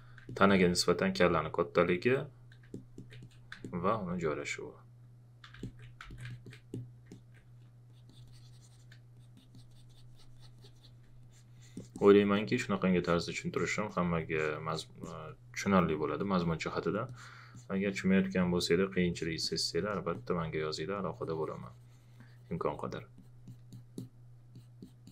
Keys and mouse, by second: 5.4 q, 5.6 alt+click, 6.0 ctrl+a, 6.1 ctrl+click.